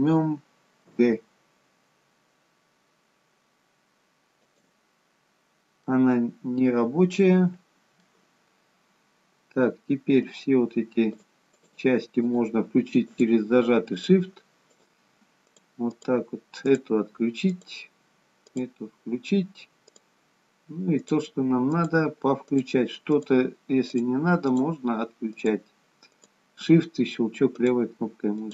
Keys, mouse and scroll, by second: 5.4-5.9 scroll down 1, 5.9 middle click, 11.5 shift+click, 11.9-28.5 shift+click.